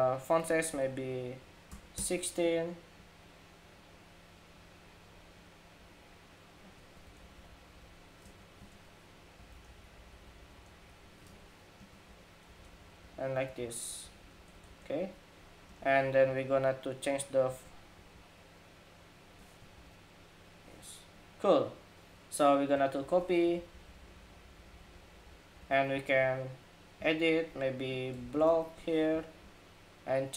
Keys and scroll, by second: 11.8 ⟲, 13.1 Escape, 22.7 super+d, 28.7 Home.